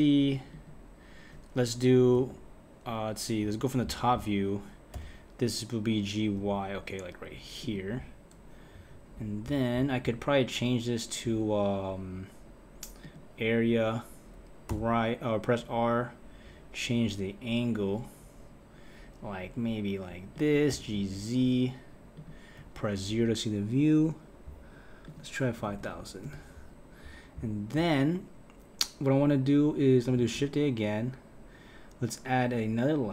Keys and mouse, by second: 2.1 KP_3, 4.9 g, 8.8 KP_1, 13.0 click, 14.7 r, 20.7 g, 22.6 KP_0, 25.1 click, 25.8 KP_0, 25.9 KP_0, 30.2 shift+a.